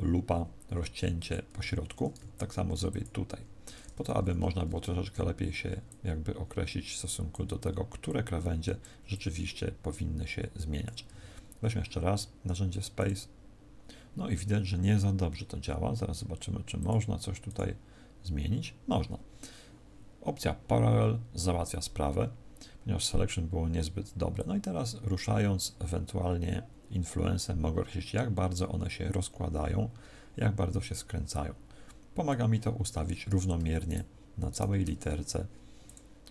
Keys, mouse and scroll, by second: 2.3 ctrl+r, 4.1 a, 12.9 click, 16.7 click, 24.3 click, 33.7 shift+right click, 34.4 shift+right click, 35.7 click.